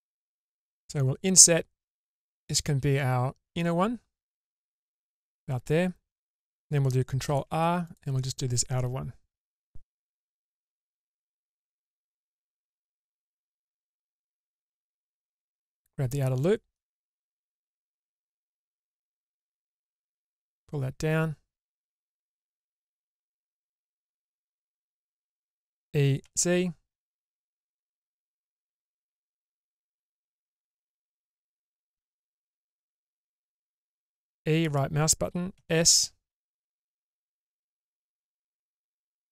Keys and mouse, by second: 1.0 ctrl+z, 2.4 i, 6.7 ctrl+r, 14.7 alt+middle click, 16.6 middle click, 17.4 alt+click, 19.2 middle click, 20.6-24.2 drag, 25.9 e, 33.1 middle click, 34.3 e, 35.7 s.